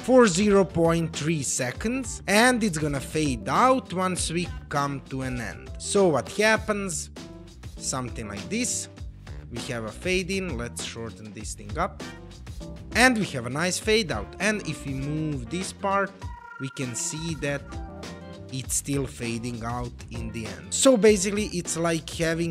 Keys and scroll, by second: 5.9 space, 10.9 space, 13.2 space, 16.1 space, 18.3 space, 19.7 space.